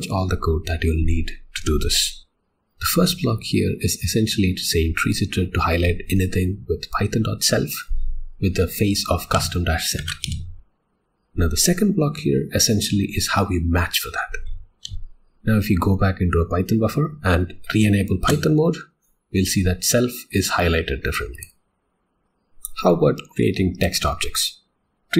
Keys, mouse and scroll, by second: 2.2 Escape, 10.2 ctrl+e, 10.6 $, 14.9 alt+x, 15.1 o, 18.2 Return, 21.1 click, 21.5 click, 22.2 click.